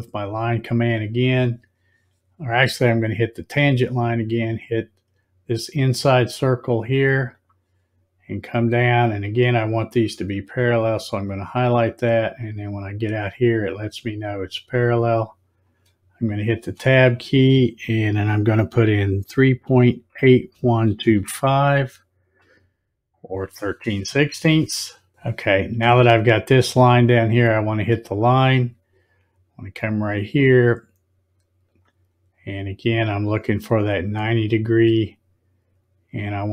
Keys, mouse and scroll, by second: 0.4 click, 3.2 click, 7.4 click, 16.5 space, 28.0 click, 31.7 click.